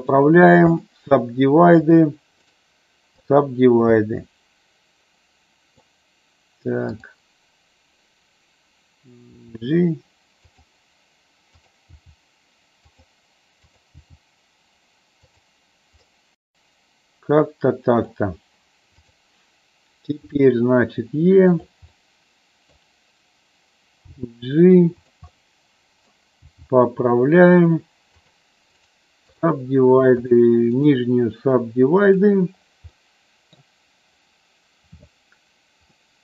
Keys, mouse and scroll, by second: 0.3 right click, 2.0 click, 2.5 right click, 4.0-6.0 middle drag, 7.1 click, 9.5 g, 10.7 click, 11.7 click, 12.0 g, 13.0 click, 13.9 click, 14.1 g, 15.4 click, 16.2-18.2 middle drag, 20.2 e, 21.4 click, 21.9 middle click, 24.0 g, 25.1 click, 25.3 middle click, 26.4 g, 27.5 click, 28.2 click, 28.9 right click, 30.8-32.3 right drag, 32.9 middle click, 35.9-36.2 middle drag.